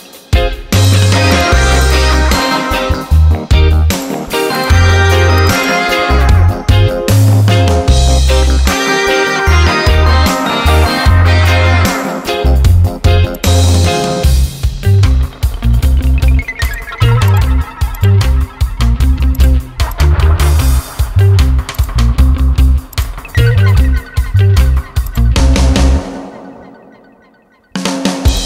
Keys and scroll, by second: 8.5 Return, 11.7 ctrl+j, 14.6 ctrl+e.